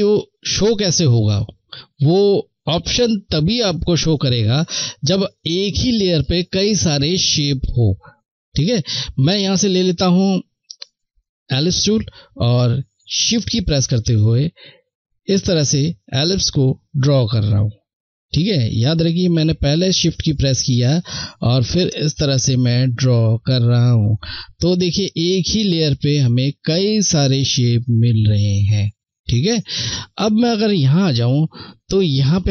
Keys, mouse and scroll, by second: 2.9 Left, 2.9 click, 8.5 click, 13.6 shift+click, 30.3 click.